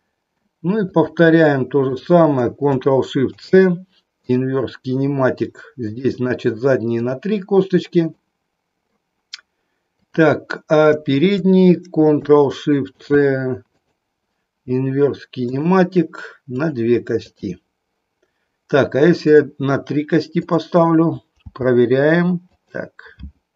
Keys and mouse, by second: 1.9 shift+click, 3.3 ctrl+shift+c, 5.9 click, 6.3 click, 8.1 middle click, 11.0 shift+click, 12.9 ctrl+shift+c, 16.6 click, 17.3 click, 19.3 click, 20.4 click, 21.4 g, 22.6 click.